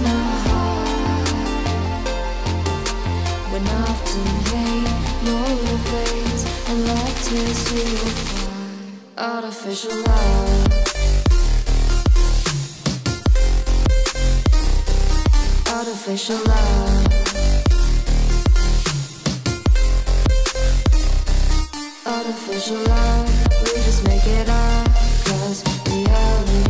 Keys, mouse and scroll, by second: 0.0-1.8 typing, 1.6 Return, 2.2 Down, 2.4 Return, 3.2-4.1 typing, 4.8 Right, 5.6 Down, 5.7 Return, 6.1 scroll down 1, 6.3 click, 6.7-9.4 typing, 9.5 ctrl+s, 9.9 Down, 10.1 Return, 10.4-10.7 scroll down 1, 10.6-13.8 typing, 13.7 click, 13.9 ctrl+s, 14.5 scroll up 1, 15.4 scroll up 1, 16.5 click, 16.8 Return, 17.9-20.9 typing, 19.8 Return, 20.9 Down, 21.4 Return, 22.8-26.6 typing.